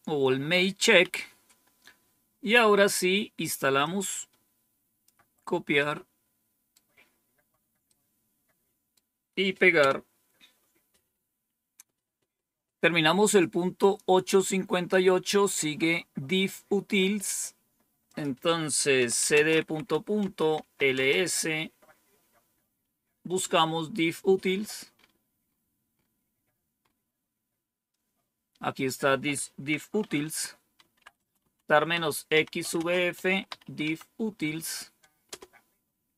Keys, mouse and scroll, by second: 0.9 Down, 3.7-5.0 drag, 5.8 right click, 7.8-8.9 right drag, 9.7 Return, 13.7 click, 18.0 click, 18.7-21.2 typing, 28.7 click, 29.9-34.1 typing, 35.2 Return.